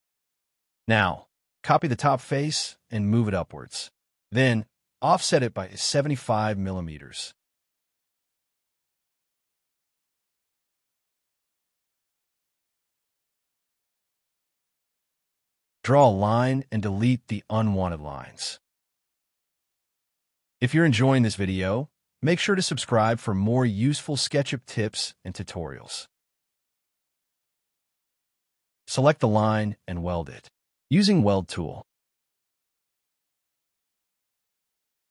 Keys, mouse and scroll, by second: 0.2 d, 0.4 scroll up 1, 1.4 m, 2.2 Up, 2.8 3, 3.1 Return, 3.4 middle click, 3.9-4.5 scroll down 1, 4.5 f, 7.3 5, 7.9 Return, 8.4 middle click, 9.6 l, 11.3 middle click, 14.9 shift+click, 15.8 shift+click, 16.1 e, 17.7 space, 17.9 double click, 18.2 shift+click, 18.3 shift+double click, 18.7 g, 19.0 Delete, 19.5 middle click, 20.0 e, 22.3 space, 22.7 double click, 23.3 Delete, 23.4 scroll down 1, 23.7 middle click, 31.9 middle click.